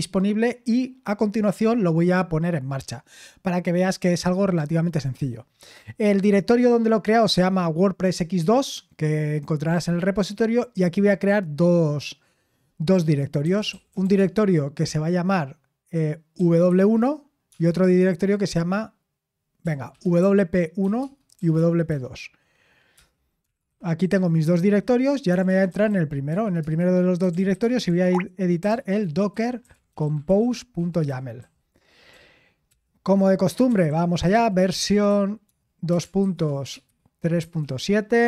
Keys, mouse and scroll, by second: 13.3-14.5 typing, 16.4-17.5 typing, 19.6-31.1 typing, 23.0 Return, 32.1-38.2 typing.